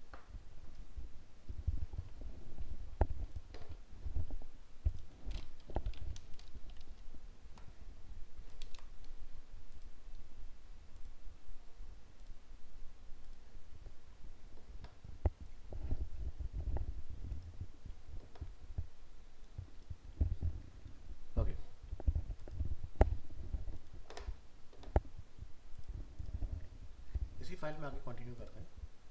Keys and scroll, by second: 8.6 ctrl+0.